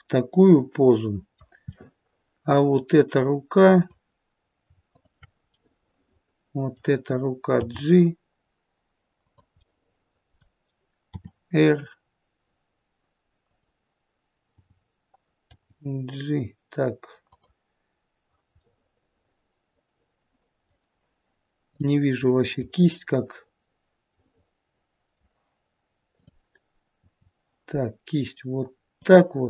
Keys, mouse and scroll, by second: 1.6 middle click, 3.6 click, 4.8 shift+click, 5.5 middle click, 7.5 g, 9.5 middle click, 11.0 r, 14.4 g, 18.5 middle click, 22.1 click, 22.1-22.7 scroll up 1, 22.7 middle click, 22.7-24.5 scroll up 1, 26.0 click, 26.9 r.